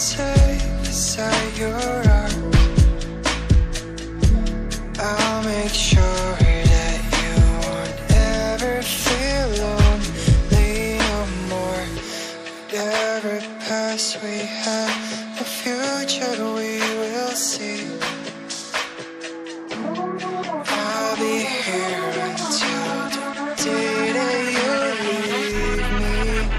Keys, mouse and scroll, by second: 0.8 click, 19.6 double click, 20.6 click, 23.3 right click, 24.5 click.